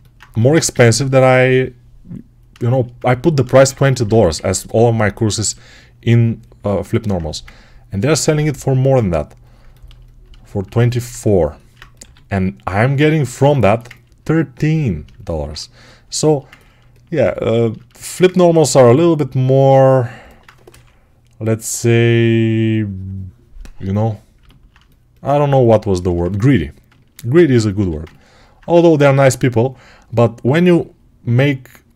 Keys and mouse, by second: 0.2 g, 0.8-2.7 alt+drag, 3.9 1, 11.9 g, 20.5 6, 27.0-31.9 alt+right drag, 27.6 g.